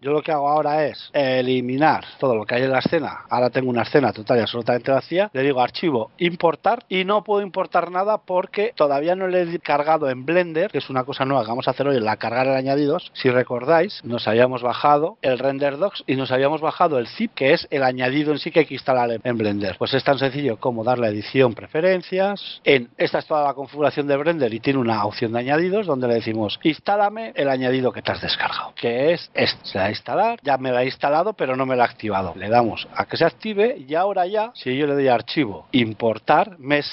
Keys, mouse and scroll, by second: 1.0 a, 1.8 x, 3.8 scroll down 1, 4.0 middle click, 5.2 scroll down 1, 5.9 click, 9.2 click, 20.5 click, 35.2 click.